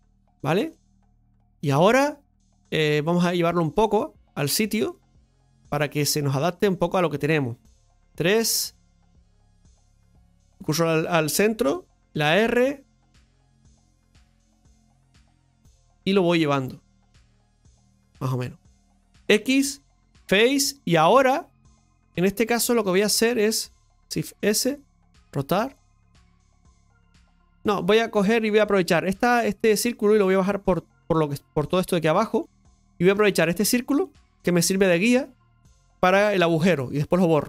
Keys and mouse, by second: 0.7 middle click, 1.8 shift+middle click, 3.1 click, 4.7 click, 5.7-7.9 middle drag, 7.9 KP_3, 10.5 shift+s, 15.2-18.5 drag, 18.5-20.3 middle drag, 20.8-21.9 middle drag, 22.1-23.7 drag, 27.0 r, 27.5 middle click, 32.8 middle click, 34.1-35.9 middle drag.